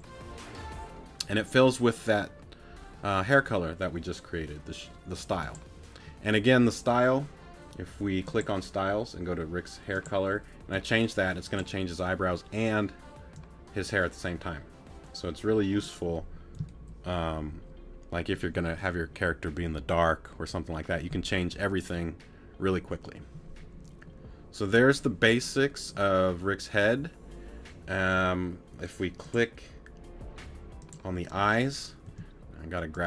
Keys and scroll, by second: 32.1 t.